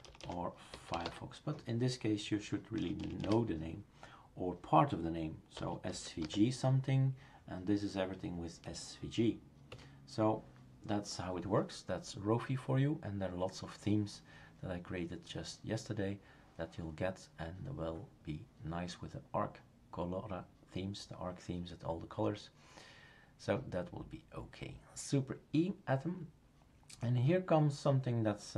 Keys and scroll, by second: 0.0-1.5 typing, 2.8 BackSpace, 3.0 BackSpace, 3.2 BackSpace, 5.3-6.7 typing, 9.7 Escape.